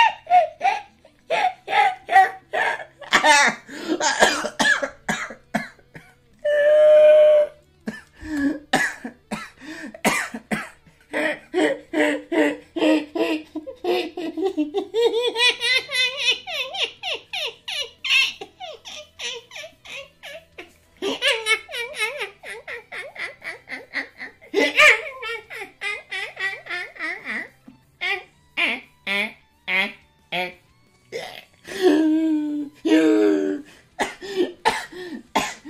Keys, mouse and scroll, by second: 11.0 space.